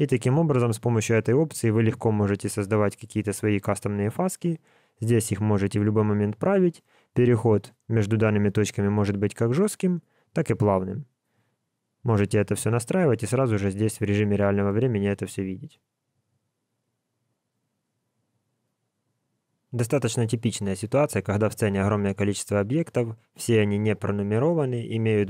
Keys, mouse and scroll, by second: 24.7-25.2 scroll down 11.